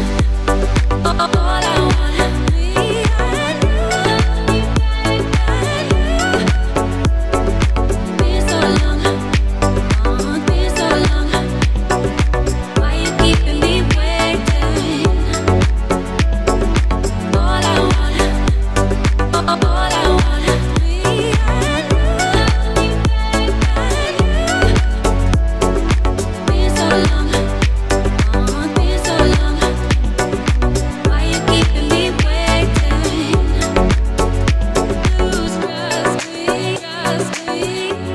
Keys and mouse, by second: 0.6 z, 1.2 middle click, 1.7 shift+d, 2.1-3.6 drag, 2.8 s, 3.6-5.4 middle drag, 4.7 z, 5.4-7.6 drag, 7.1 s, 7.6 middle click, 8.4-11.3 drag, 10.0 s, 11.3-12.7 middle drag, 12.7-17.2 drag, 15.7 shift+d, 16.8 s, 17.2 middle click, 17.5-22.6 drag, 20.8-23.5 typing, 22.6-38.1 middle drag, 34.9 KP_1, 35.0 KP_3.